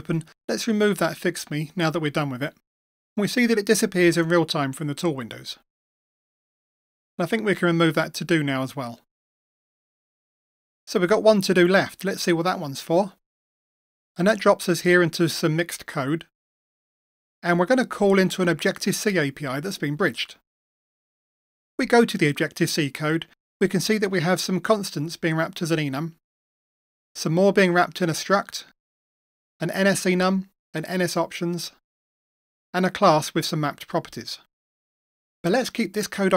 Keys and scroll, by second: 3.6 Delete, 8.9 Delete, 12.9 Delete.